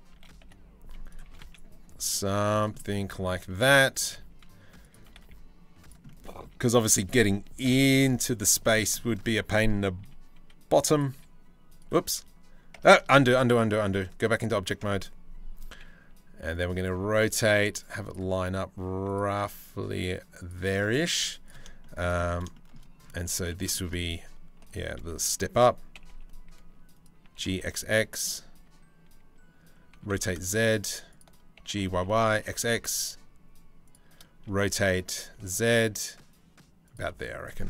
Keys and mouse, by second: 0.9 s, 2.4 click, 3.6 s, 4.6 s, 7.3 KP_7, 7.5 z, 9.6 g, 10.8 r, 11.8 Tab, 12.4 Tab, 13.0 ctrl+z, 13.6 ctrl+z, 14.0 ctrl+z, 14.5 Tab, 15.4 g, 16.5 r, 17.9 g, 19.0 r, 20.3 middle click, 20.8 z, 21.3-23.9 shift+middle drag, 24.3 g, 26.9 g, 28.2 e, 29.6 r, 31.2 g, 34.1 r.